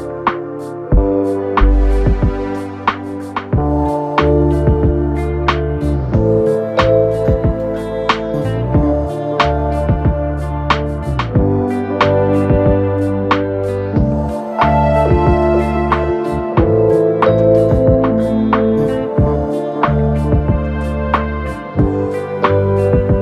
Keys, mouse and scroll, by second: 0.0 click, 1.8-2.3 scroll down 2, 2.3 KP_3, 3.0 2, 4.0 click, 4.9 f, 5.3 f, 5.6 f, 6.7 click, 6.9 f, 7.4 f, 8.4-8.9 scroll down 2, 8.9-9.7 scroll up 2, 9.7 KP_1, 11.1 KP_7, 11.8-12.5 scroll up 3, 12.5 1, 13.9 click, 15.3 click, 16.0-17.4 middle drag, 17.4 click, 18.4 KP_7, 20.3 click, 21.7 click, 22.3 click.